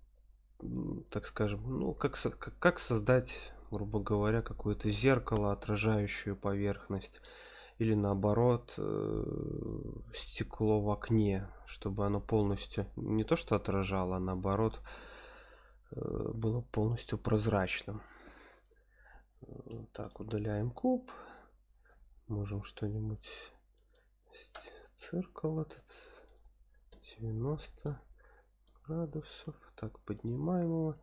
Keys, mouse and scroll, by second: 17.9-18.3 scroll up 2, 19.7 x, 20.6 shift+a, 21.7 shift+a, 25.2 KP_3, 25.4 r, 25.7 KP_9, 26.1 KP_0, 26.9 KP_Enter, 27.8-28.6 middle drag, 29.1 g, 29.3 z, 30.1 click, 30.9 s.